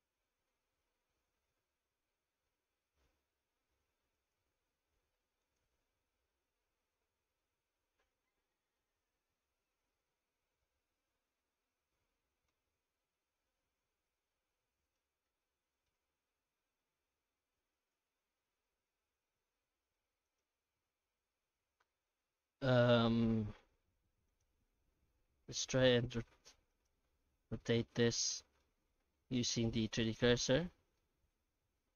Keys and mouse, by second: 15.4-19.5 middle drag, 19.8 shift+middle click, 20.2 right click, 20.5 Tab, 21.3-23.6 middle drag, 23.9 Tab, 24.3 right click, 24.5 Tab, 24.8 a, 25.4 r, 27.6-28.6 middle drag, 30.6 alt+middle click.